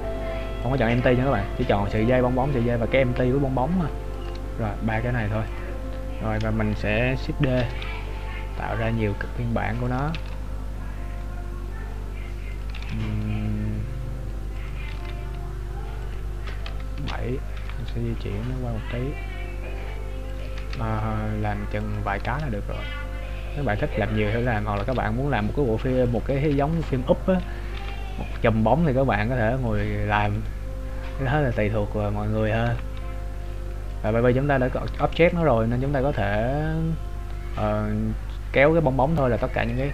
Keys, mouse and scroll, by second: 1.9 click, 2.9-3.7 scroll down 4, 4.0 click, 4.5 scroll up 1, 5.2 scroll up 2, 5.4 click, 7.6 shift+d, 16.7 KP_7, 17.6 g, 20.5 click, 20.8 shift+d, 24.7 click, 24.9 shift+d, 26.2 click, 26.7 KP_3, 28.0 g, 30.7 right click, 32.1-32.4 scroll down 1, 32.7 g, 36.2 click, 39.7 right click.